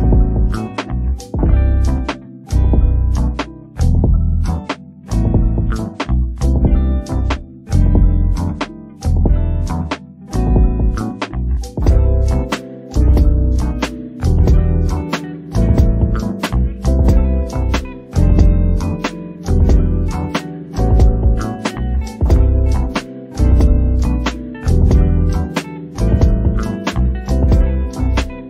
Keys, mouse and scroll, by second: 0.0 alt+a, 0.2 ctrl+right click, 1.0 click, 1.6 alt+a, 2.1 scroll down 1, 2.3 middle click, 2.7 scroll up 1, 3.1 alt+click, 3.4-4.5 shift+middle drag, 4.5 e, 4.9 s, 6.0 shift+middle click, 6.3 s, 7.0 shift+middle click, 7.4-7.8 scroll up 1, 7.8 click, 8.0 click, 8.6 middle click, 9.3 click, 9.4 middle click, 9.9 click, 10.4 middle click, 11.0 ctrl+z, 11.3 click, 11.7 middle click, 12.1 click, 12.3 scroll down 1, 12.4 shift+middle click, 12.9 scroll up 3, 13.1-14.7 middle drag, 14.7 click, 14.9 click, 15.4 middle click, 15.6 ctrl+z, 15.8 shift+middle click, 16.0 scroll up 2, 16.4 alt+click, 17.0 alt+click, 17.5 middle click, 18.0 KP_Decimal, 18.3 middle click, 18.4-19.3 scroll up 20, 19.3 click, 19.6 click, 20.2-20.9 scroll down 18, 20.9 middle click, 21.4 click, 22.1 shift+middle click, 22.3 scroll up 5, 22.5 shift+middle click, 23.0 click, 23.2 click, 23.8 scroll down 4, 23.9 shift+middle click, 24.5 shift+click, 24.7-25.0 scroll down 5, 25.0 shift+click, 25.9 shift+middle click, 26.0 scroll up 5, 26.2 shift+middle click, 26.6 click, 26.9 click, 27.7 click, 27.9 shift+click, 28.2 click.